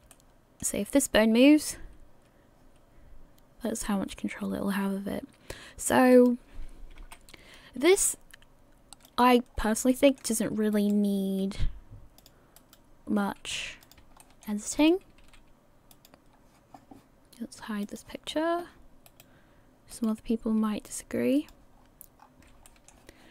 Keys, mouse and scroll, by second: 0.1 middle click, 1.7 r, 7.0 KP_1, 8.1 r, 9.5-9.9 scroll down 2, 9.9 shift+middle click, 11.1 right click, 11.4 r, 12.8 right click, 13.2 r, 14.2 shift+middle click, 15.0 right click, 15.2 r, 16.3 scroll down 2, 17.2-17.8 scroll down 1, 17.8 click, 18.3 scroll up 1, 19.4 right click, 19.4 scroll up 2, 20.2 right click, 20.6 r, 21.8-22.3 scroll down 4, 22.2-22.7 scroll up 4, 22.7 shift+middle click.